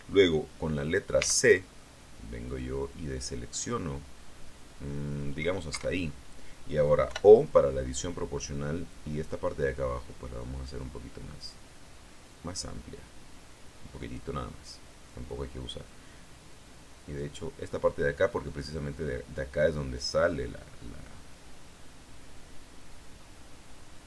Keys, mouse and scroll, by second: 1.1 c, 1.7-5.5 middle drag, 5.6 Escape, 7.0 o, 9.2-10.4 drag, 10.4-10.7 scroll up 1, 11.4-12.0 scroll down 2, 17.1 right click, 19.8-24.0 drag.